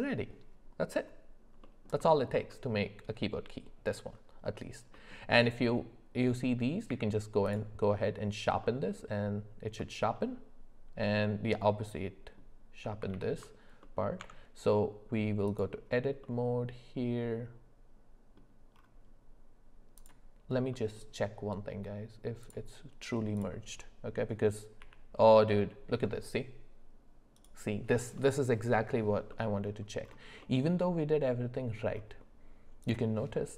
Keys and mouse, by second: 1.6 middle click, 2.1 shift+middle click, 2.5-2.9 middle drag, 4.9 middle click, 6.9 q, 8.6 middle click, 9.8 middle click, 11.6 middle click, 13.1 ctrl+z, 13.8 middle click, 14.2 Tab, 16.2-18.4 middle drag, 20.7 middle click, 22.4 click, 24.8 g, 28.2 middle click, 29.3 middle click, 30.4 middle click, 31.3 click, 31.5 middle click, 32.8 click.